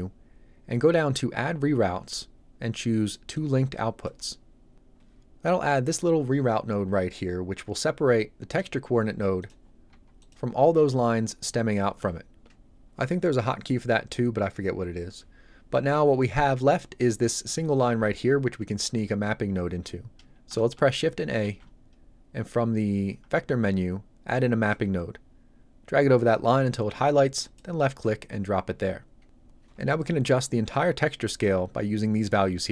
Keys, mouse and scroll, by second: 3.3 click, 8.5 click, 8.9 g, 9.4 click, 9.6-9.9 scroll down 1, 9.9 g, 10.2 click, 21.5 shift+a, 24.4 click, 30.7 click.